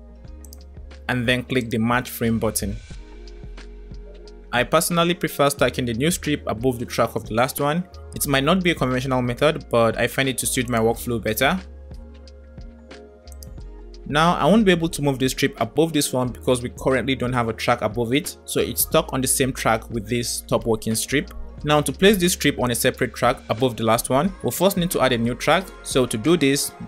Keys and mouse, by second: 1.6 click, 3.5 middle click, 10.2 click, 13.4 click, 14.4 g, 22.5 click.